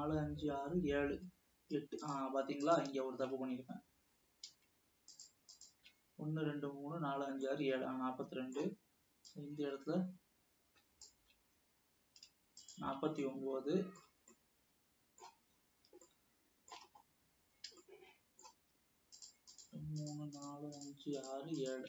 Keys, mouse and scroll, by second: 2.2 shift+click, 2.8 shift+click, 5.2 shift+click, 5.7 shift+click, 7.7-9.6 middle drag, 9.6 shift+click, 12.9 shift+click, 13.4-15.8 shift+middle drag, 15.8 scroll up 2, 16.2-17.1 shift+middle drag, 17.1 scroll up 2, 18.0-19.4 shift+middle drag, 19.7 shift+click, 20.7 shift+click, 21.3 shift+click.